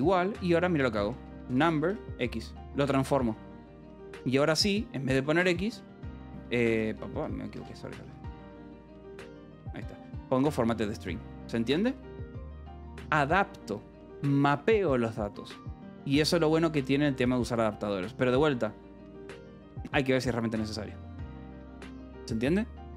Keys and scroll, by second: 1.1 u, 1.4 e, 2.0 x, 2.8 ;, 3.1 Escape, 4.2 j, 4.5 h, 5.9 BackSpace, 7.0 Escape, 7.5-9.8 typing, 8.9 Escape, 10.6 Escape, 10.9-12.4 typing, 16.3 j, 16.6 k, 17.2 j, 17.8 Escape.